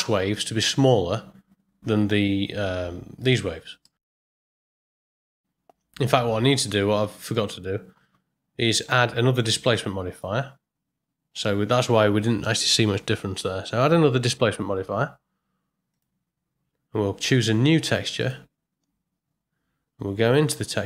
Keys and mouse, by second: 3.9 middle click, 4.9 click, 7.3 click, 10.1-16.1 drag, 18.1 click.